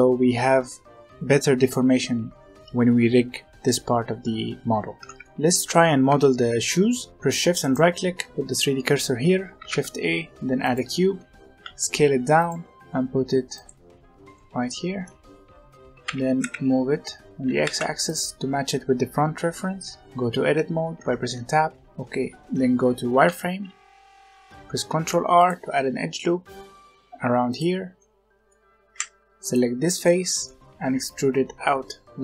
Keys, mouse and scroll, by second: 4.9 Tab, 5.1-7.1 middle drag, 7.1-7.5 scroll up 1, 7.5-9.5 shift+right drag, 9.5 shift+a, 11.4 s, 12.6 scroll up 2, 12.7 g, 14.0 scroll down 2, 14.3-15.2 middle drag, 15.2-15.9 scroll down 1, 15.9 g, 17.2 middle click, 17.4 g, 19.3-20.9 middle drag, 20.9 Tab, 22.7 z, 24.8 ctrl+r, 27.9 middle click, 28.8 3, 29.4 click, 29.9 middle click, 30.7 e.